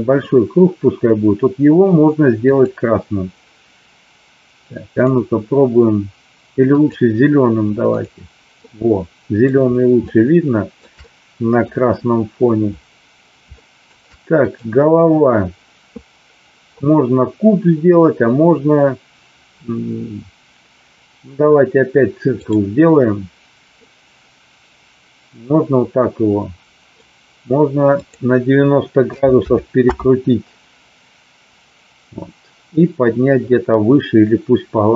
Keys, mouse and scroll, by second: 2.5 click, 5.1-7.0 drag, 8.5-9.4 middle drag, 9.9-10.8 shift+middle drag, 10.9 middle click, 13.6 shift+middle click, 14.3 click, 22.4 click, 23.9-27.0 middle drag, 27.9-30.4 drag.